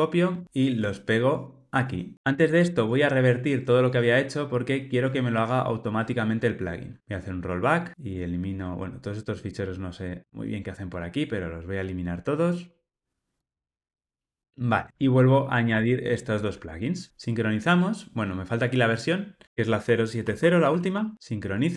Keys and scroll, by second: 2.2 super+z, 7.0 alt+super+z, 13.5 Delete, 15.6 super+v.